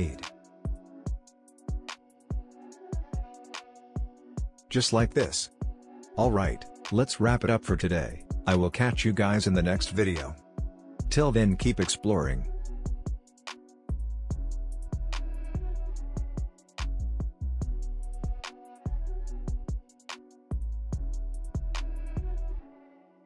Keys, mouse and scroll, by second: 0.7-2.5 typing, 3.9 click, 5.0 space, 7.1-10.6 drag, 10.6 space.